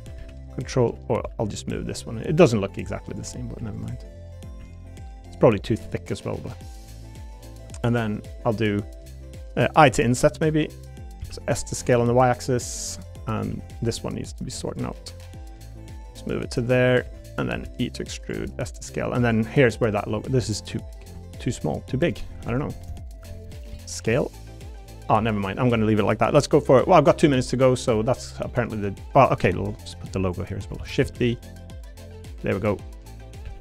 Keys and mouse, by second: 0.1 ctrl+r, 0.9 2, 2.3 click, 2.3 1, 3.6 3, 4.0 middle click, 4.6 3, 4.8 click, 6.7 click, 9.8 i, 10.9 click, 11.2 s, 12.7 click, 12.7 y, 12.7 u, 13.5 z, 13.9 click, 14.4 1, 15.2 click, 17.0 3, 17.6 e, 18.2 click, 18.4 s, 18.7 click, 19.2 click, 19.9 middle click, 22.0 shift+click, 22.7 ctrl+KP_Add, 22.9 ctrl+KP_Add, 23.7 s, 24.9 click, 25.6 middle click, 26.9 middle click, 27.4 shift+middle click, 28.5 middle click, 29.1 middle click, 29.7 click, 30.3 click, 30.8 shift+d, 31.0 s, 31.5 click, 32.1 click, 32.9 click, 33.4 e.